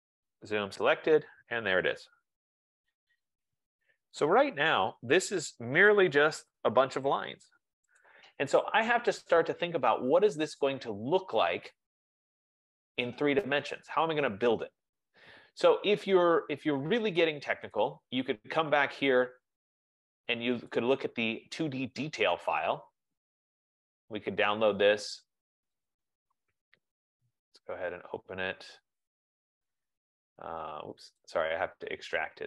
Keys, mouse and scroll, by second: 0.8 Return, 3.9 click, 4.0 click, 6.0 right click, 8.4 click, 12.7 click, 18.3 click, 19.2 F15, 20.1 click, 20.9 click, 23.4 click, 26.0 click, 27.2 click, 31.5 click.